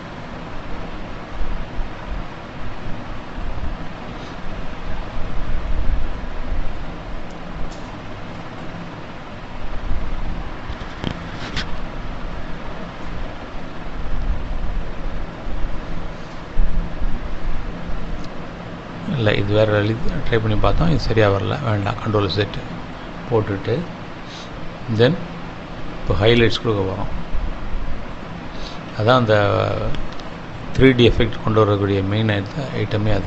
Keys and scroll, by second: 26.1 ctrl+z, 32.3 space.